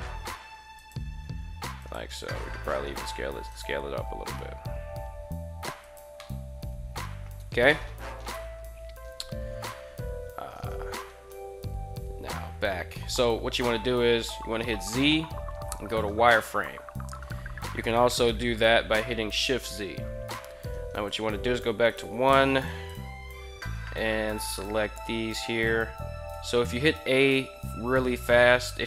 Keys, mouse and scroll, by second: 0.6 click, 1.2 r, 1.6 click, 2.1 s, 3.3 click, 3.6 g, 5.6 drag, 6.1-7.5 middle drag, 8.0 KP_3, 9.4 KP_1, 11.7 z, 13.3 z, 14.4 z, 18.0 z, 19.2 shift+z, 20.8 1, 21.6 a, 21.9 a, 22.1 b, 24.3 g, 25.3 right click, 26.0 a, 26.3 a.